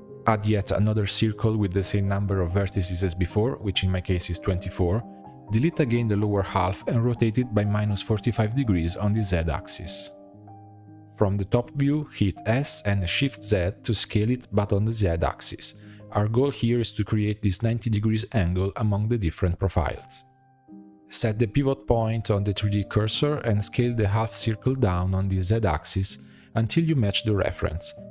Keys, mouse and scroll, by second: 0.5 middle drag, 0.7 Tab, 1.4 r, 3.1 click, 3.5 shift+middle click, 4.1-4.6 scroll down 2, 4.6 click, 4.7 b, 6.1 x, 7.8 middle click, 8.4 a, 8.8 r, 10.7 click, 11.1 shift+middle click, 11.4-12.0 scroll up 6, 12.0 shift+middle click, 12.4 s, 15.7 shift+b, 17.2 shift+middle click, 17.8 s, 19.3 click, 20.5 a, 20.7-21.8 drag, 21.8 middle click, 22.3 s, 25.6 Tab, 25.8 middle click, 26.6 click, 27.3 Delete, 27.5-28.1 middle drag.